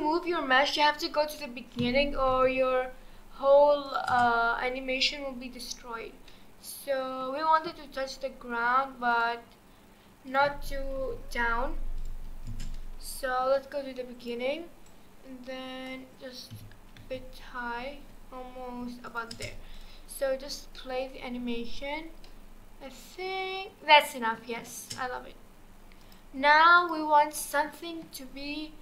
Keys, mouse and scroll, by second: 1.8 g, 4.1 space, 6.3-9.1 middle drag, 9.1 click, 10.3 click, 11.0 KP_1, 12.0-12.5 drag, 12.5 space, 14.2 click, 16.5 g, 19.3 space, 19.7 click, 20.6 scroll down 1, 20.8-24.8 middle drag, 24.8 space, 26.0 click, 26.8-27.4 drag, 27.4-28.3 middle drag, 28.3-28.8 scroll up 1.